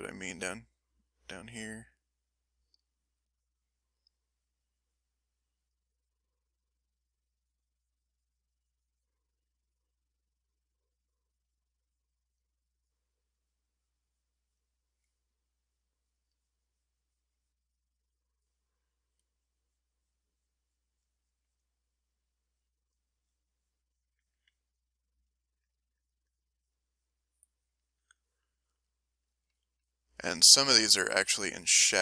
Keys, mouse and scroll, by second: 2.4-5.9 drag, 5.7 right click, 15.7-18.4 drag, 18.9-21.7 drag, 21.8 middle click, 22.4-25.3 drag, 24.9 middle click, 25.5-28.2 drag, 28.4 middle click, 29.1-32.0 drag.